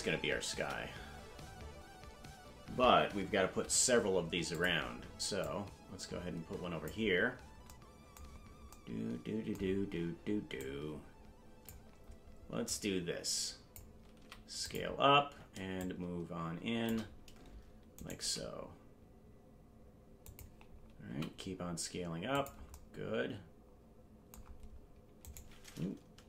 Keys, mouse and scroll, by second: 0.5 KP_0, 1.1-2.2 scroll down 4, 3.4 s, 5.4-6.9 drag, 7.3-7.7 scroll down 3, 8.3-8.7 scroll up 5, 10.6-11.7 drag, 12.6-13.8 drag, 14.1 s, 15.8-17.0 shift+drag, 17.9 right click, 18.2 g, 21.0 s, 25.2 right click, 26.1 Delete.